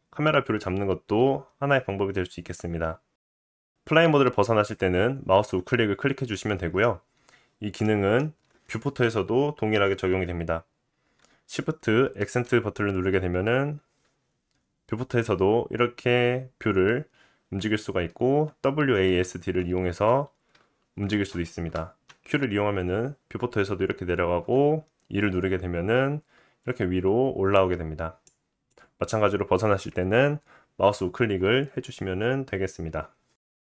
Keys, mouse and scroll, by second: 6.3-33.8 middle drag, 6.9-7.8 scroll down 3, 12.2 shift+`.